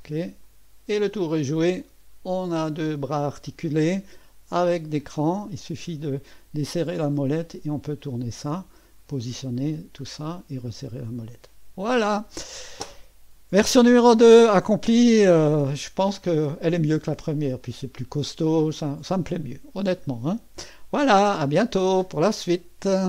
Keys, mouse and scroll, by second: 0.5 click, 1.3 scroll down 1, 1.8-4.8 drag, 5.4-7.8 scroll up 1, 7.8-9.3 drag, 9.6 scroll down 1, 11.0-12.0 right drag, 15.6-17.6 drag, 18.4-20.1 drag, 21.7 right click, 23.0 click.